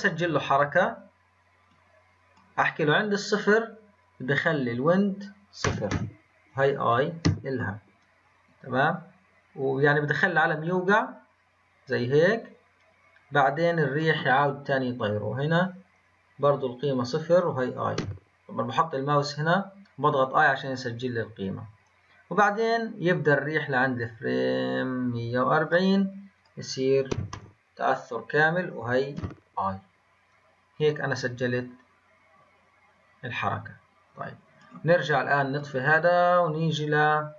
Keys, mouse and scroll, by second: 1.7-19.9 drag, 19.9 typing, 29.5 typing, 35.9-36.2 scroll up 1, 37.1-37.3 scroll down 2.